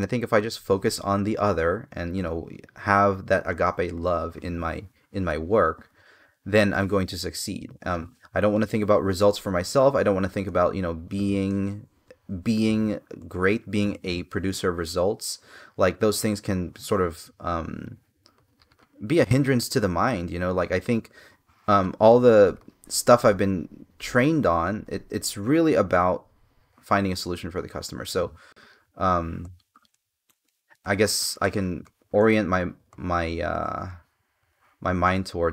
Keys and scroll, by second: 4.7 space, 11.3 space, 14.1 space, 29.0 space, 31.0 space.